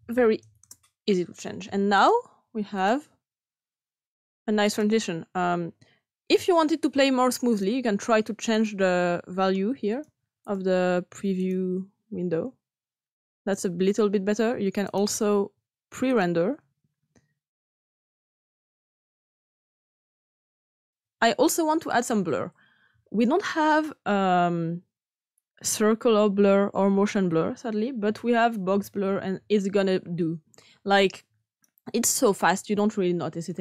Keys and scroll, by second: 0.6 Return, 28.0-28.9 typing.